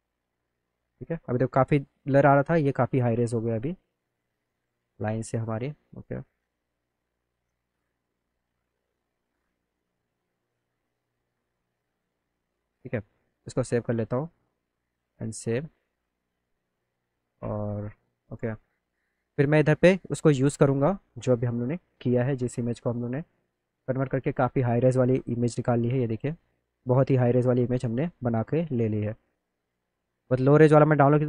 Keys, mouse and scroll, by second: 2.1 click, 3.2 click, 4.6 click, 8.5 click, 11.7 click, 13.3 click, 14.7 click, 17.6 click, 18.3 click, 20.2-21.2 middle drag, 23.9 click, 24.0 click, 25.8 middle click, 26.5 click, 27.1 click, 28.8 middle click, 30.0 middle click, 30.5 click.